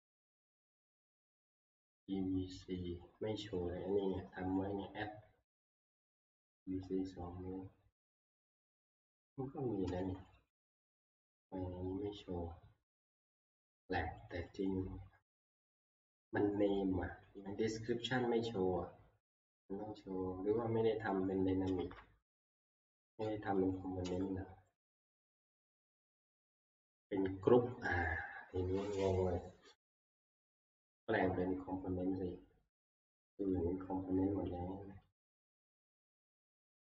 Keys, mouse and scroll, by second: 0.3 F11, 2.8 click, 10.1 click, 10.4 click, 10.6 click, 11.1 alt+Tab, 11.8 middle click, 11.9 scroll, 13.0 click, 13.6-14.1 scroll, 14.3 click, 14.6 click, 17.4 click, 18.1 middle click, 21.3 click, 21.9 alt+Tab, 23.6 click, 23.8 click, 24.2 click, 24.8 click, 25.5 ctrl+q, 28.2 click, 33.5 click, 35.2 click, 36.0 right click, 36.0 click.